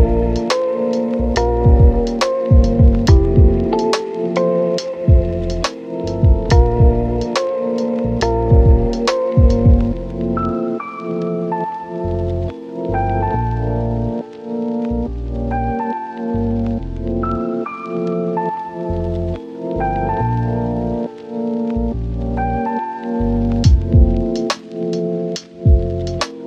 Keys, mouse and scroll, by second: 1.2 click, 1.3 right click, 2.3 scroll down 1, 2.4-2.7 scroll up 1, 2.7 scroll down 1, 2.8 scroll up 1, 3.5 scroll down 1, 3.6-3.9 scroll up 1, 3.9 scroll down 1, 4.0-4.5 scroll up 1, 4.5 scroll down 1, 4.6-5.0 scroll up 1, 5.0 right click, 5.4 scroll down 1, 5.6-6.7 scroll up 1, 9.2 scroll down 1, 9.4-12.7 scroll up 1, 12.7 right click, 12.8 click, 13.5 right click, 13.9-14.3 scroll up 1, 14.3 click, 14.6 scroll down 1, 14.7 scroll up 1, 14.8 right click, 15.2 scroll up 1, 15.6 ctrl+shift+click, 17.1 scroll down 1, 17.2-17.8 scroll up 2, 17.3 right click, 17.8 right click, 18.8 scroll down 1, 18.9 scroll up 1, 19.0 right click, 20.0 click, 20.3 scroll down 1, 20.4-20.8 scroll up 1, 20.8 click, 21.0-21.4 scroll up 1, 21.4 click, 22.1 right click, 22.7 click, 22.9 right click, 23.8 click, 24.0 scroll down 1, 24.7 typing, 25.8 Return.